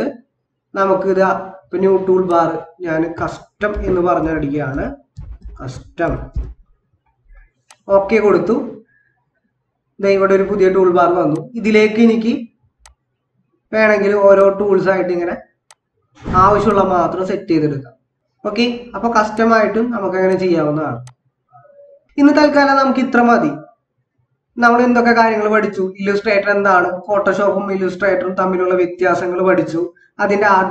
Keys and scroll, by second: 3.9-6.8 typing.